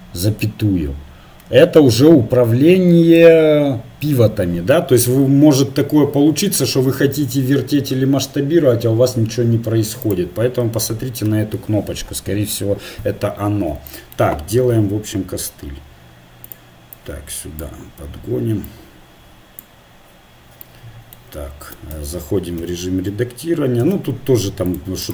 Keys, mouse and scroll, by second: 5.2 s, 14.2 middle click, 14.8 s, 17.0-19.3 drag, 21.9 Tab, 22.6 z, 23.8 ctrl+r.